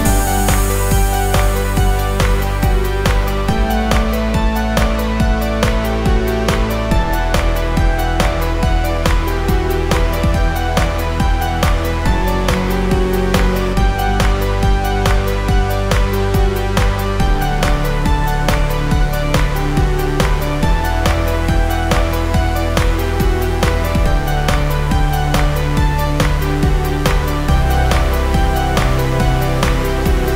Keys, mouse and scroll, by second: 3.2 click, 3.3 click, 5.7 click, 11.4 click, 13.8 click, 19.4 click, 19.5 click, 23.4 click, 27.4 click.